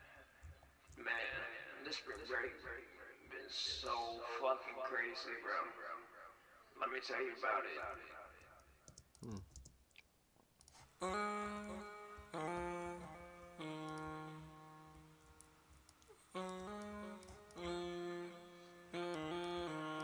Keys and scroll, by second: 3.8 super+s, 9.4 shift+s, 11.4 ctrl+Page_Up, 11.7 ctrl+Page_Up, 17.0-17.8 typing, 19.2-20.0 typing.